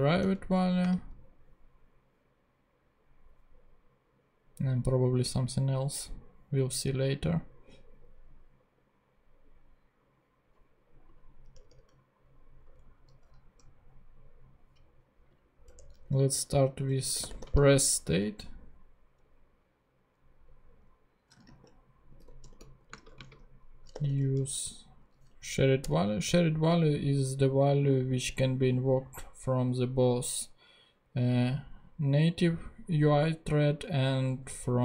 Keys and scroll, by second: 0.2 Return, 0.8 space, 11.5 Return, 12.9 Up, 15.6 Return, 16.8-17.8 typing, 21.1-24.6 typing, 25.4 Down, 25.9 Return.